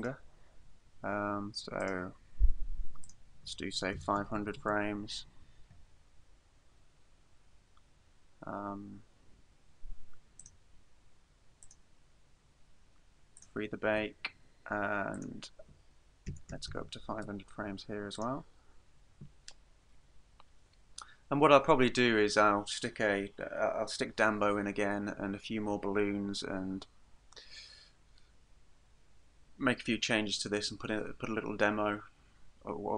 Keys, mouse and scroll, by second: 0.0 click, 3.1 click, 6.5-8.7 scroll down 4, 10.5 right click, 11.7 click, 13.4 click, 15.2 click, 18.2 click.